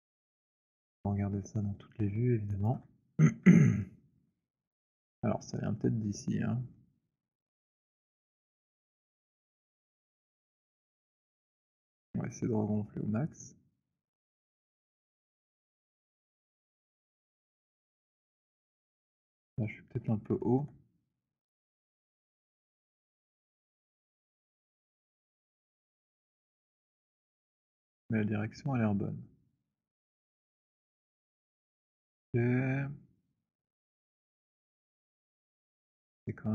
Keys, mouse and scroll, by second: 1.4 click, 1.4 middle click, 2.9 middle click, 2.9 alt+click, 3.2 middle click, 3.9 alt+middle click, 6.2 scroll, 9.4 alt+click, 12.0 click, 13.7 click, 14.2 alt+click, 16.6 click, 19.6 alt+middle click, 20.6 alt+middle click, 24.2 click, 26.3 click, 26.5 z, 30.9 click.